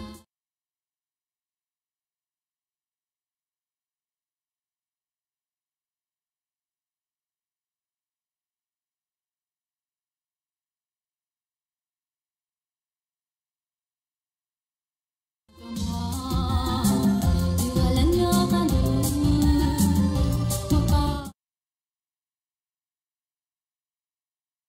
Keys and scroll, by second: 5.0 End, 10.0 ctrl+s, 15.5 space, 21.0 space, 24.0 space.